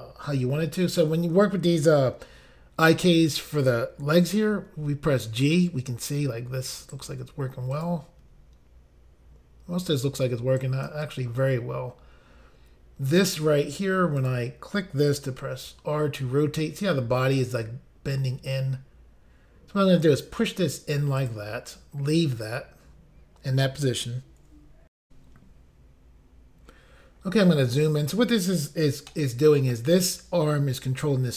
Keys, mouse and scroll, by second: 6.9 right click, 7.1 right click, 7.7 click, 7.9 click, 10.6 right click, 14.2 click, 14.3 click, 15.3 r, 21.2 click, 21.3 click, 25.0 Insert, 27.2 scroll up 2, 29.0 shift+middle click.